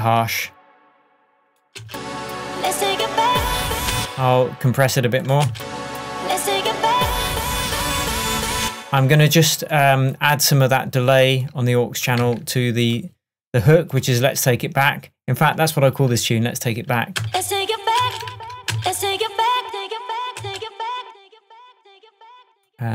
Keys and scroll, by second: 1.9 space, 4.0 space, 5.6 space, 8.7 space, 17.3 space, 20.5 space.